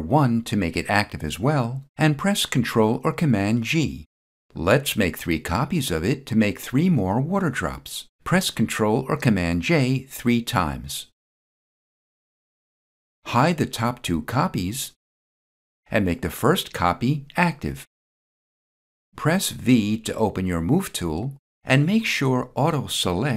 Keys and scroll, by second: 2.5 ctrl+g, 8.6 ctrl+g, 19.6 v.